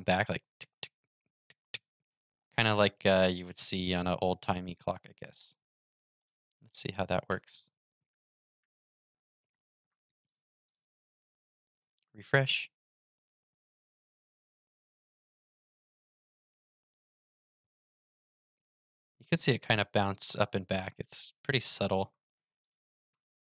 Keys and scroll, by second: 11.5 super+r.